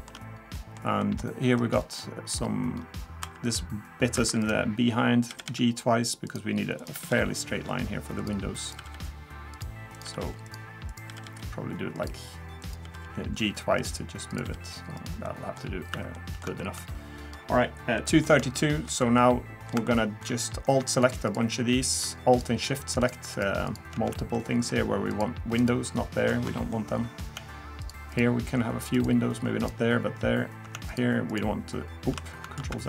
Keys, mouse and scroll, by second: 0.5 middle click, 1.0 middle click, 1.2-2.0 scroll up 2, 1.6 middle click, 2.0 middle click, 2.7 scroll up 1, 3.2 2, 3.4 click, 4.2 1, 4.4 click, 5.3 g, 6.8 click, 6.9 g, 8.6 click, 8.8 g, 9.9 click, 10.0 g, 10.9 click, 11.1 g, 12.6 click, 12.8 g, 14.3 click, 14.4 g, 15.2 middle click, 15.6-15.9 scroll down 3, 15.9 3, 16.1 middle click, 16.6 shift+middle click, 16.9 scroll up 2, 17.2-17.9 scroll down 1, 17.9 middle click, 18.4 middle click, 19.2 middle click, 19.8 shift+middle click, 21.0 alt+click, 21.3 alt+click, 22.3 alt+shift+click, 22.5 alt+shift+click, 24.4 alt+shift+middle click, 25.1 alt+shift+click, 26.7 shift+middle click, 27.8 alt+shift+click, 32.6 ctrl+z.